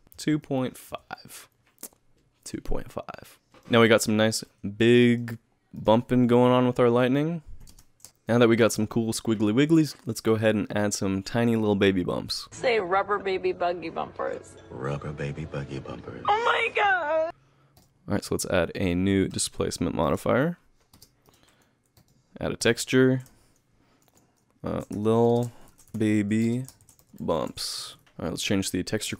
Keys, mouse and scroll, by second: 3.5 alt+KP_1, 3.5 alt+right click, 4.0 middle click, 4.6-5.0 scroll down 7, 5.0 middle click, 5.8 click, 6.5 KP_Add, 7.0 KP_Add, 7.6 ctrl+KP_Add, 7.7 ctrl+space.